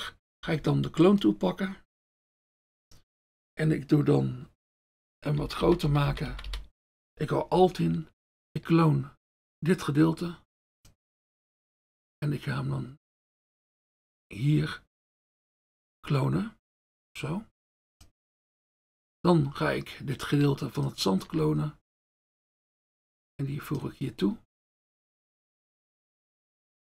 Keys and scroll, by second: 2.2 F1, 5.6-6.5 typing, 7.0 F1.